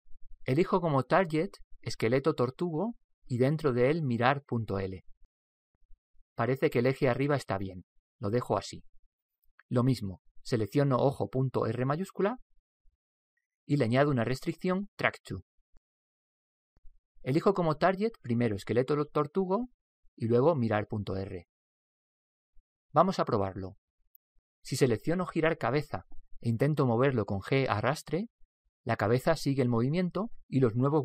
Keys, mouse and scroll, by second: 2.1 click, 4.5 click, 11.9 right click, 13.7 right click, 14.3 click, 17.9 click, 20.6 click, 27.2 right click, 28.2 g, 28.8 Return, 28.8 g.